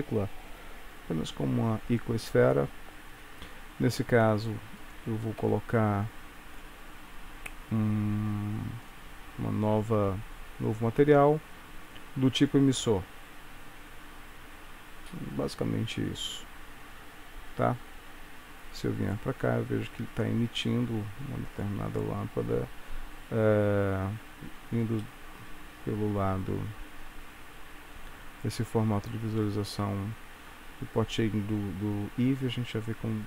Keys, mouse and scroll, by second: 4.9 click, 6.6 click, 11.2 click, 19.5 click, 21.9 click, 25.1 middle click.